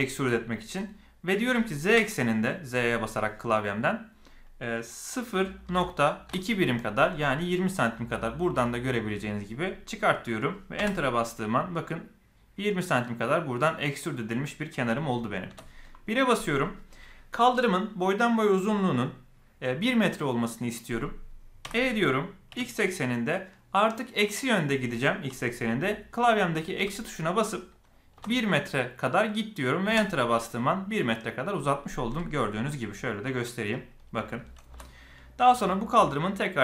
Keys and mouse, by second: 12.9-13.5 middle drag, 15.4 KP_1, 21.6 e, 32.1-33.7 middle drag, 34.7 KP_1.